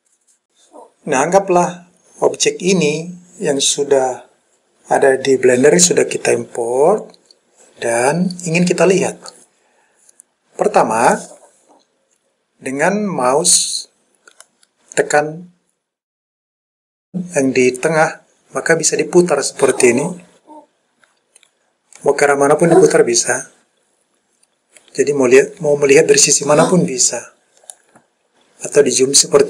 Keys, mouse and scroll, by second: 14.5-27.8 middle drag, 28.4-29.4 scroll up 4.